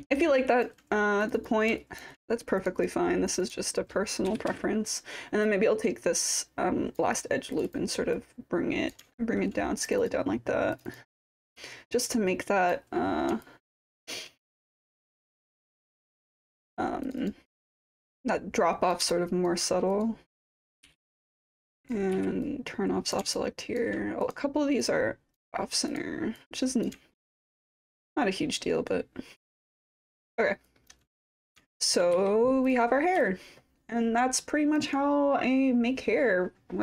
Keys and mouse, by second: 0.1 alt+click, 1.4 click, 1.8 alt+click, 2.8 click, 3.4 click, 4.3 e, 4.5 r, 5.5-7.0 drag, 7.5 click, 7.7 click, 8.1 click, 9.2 alt+middle click, 9.3 alt+click, 10.0 click, 11.4-12.7 drag, 13.4 alt+click, 14.0 alt+middle click, 14.7-15.4 alt+drag, 15.8 click, 16.4 click, 17.0 click, 17.2 click, 17.9-18.9 drag, 19.1 alt+click, 20.0 click, 20.8 w, 21.3 click, 22.1 b, 22.5 click, 23.3-23.8 alt+drag, 24.2 click, 24.9 click, 25.9 click, 26.4 click, 27.1 alt+click, 27.6-29.7 alt+drag, 30.2 alt+middle click, 30.3 alt+click, 30.7 alt+click, 31.7 alt+middle click, 31.8 alt+click, 32.1 4, 33.2-34.8 alt+drag.